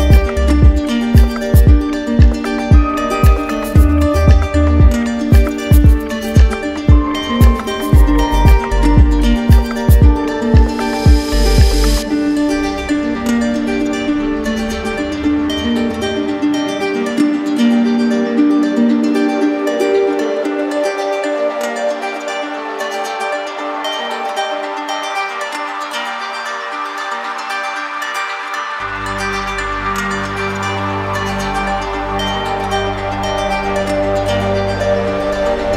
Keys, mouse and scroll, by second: 1.3 right click, 2.3 alt+right click, 2.7 right click, 4.1 click, 4.7 d, 6.0 shift+click, 6.3 shift+click, 6.8 shift+click, 7.2 shift+click, 7.8 alt+right click, 8.6 shift+click, 8.9 shift+click, 9.2 shift+click, 10.1 d, 12.8 shift+click, 13.7 alt+right click, 15.1 alt+right click, 15.8 right click, 16.6 z, 17.7-18.7 drag, 18.7 right click, 19.7 click, 20.4 right click, 20.9 click, 24.4 shift+click, 25.8 alt+click, 26.1 ctrl+z, 27.5 click, 29.7 click, 32.3 alt+click, 32.5 ctrl+z, 33.9-35.0 drag.